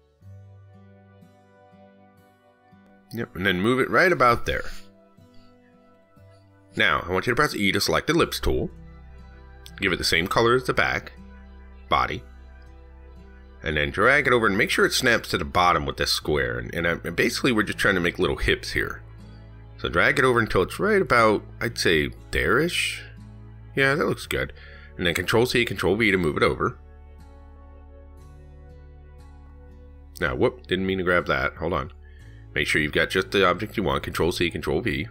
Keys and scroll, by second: 14.6 ctrl+shift+Down, 26.9 ctrl+c, 27.1 ctrl+v, 32.2 ctrl+z, 34.7 ctrl+c, 34.9 ctrl+v.